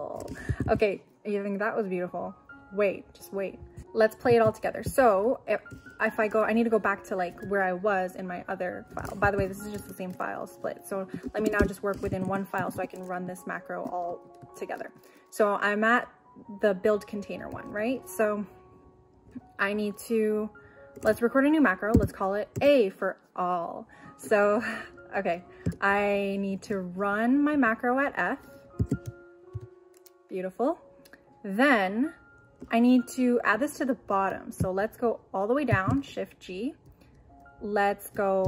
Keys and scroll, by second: 0.5 u, 21.9 q, 22.6 a, 28.8 shift+2, 29.5 shift+f, 35.7 shift+g.